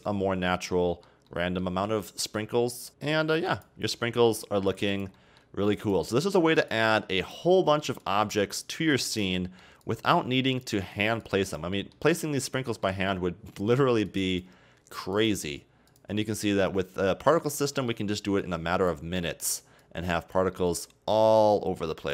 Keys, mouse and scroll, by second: 0.3 scroll down 4, 0.5-3.5 middle drag, 3.5-4.0 drag, 4.0-4.7 middle drag, 4.7-5.2 drag, 5.2-5.8 middle drag, 5.8 drag, 6.1-6.8 middle drag, 6.8-7.5 drag, 7.5-8.1 middle drag, 8.1-9.4 drag, 9.4-9.9 middle drag, 9.9-10.8 drag, 10.8-11.3 middle drag, 11.3-11.8 drag, 11.8-14.1 middle drag, 14.1-16.5 drag, 16.5-18.5 middle drag, 18.5-19.2 drag, 19.2-19.9 middle drag, 19.9-20.6 drag, 20.6-21.2 middle drag, 21.2-22.1 drag.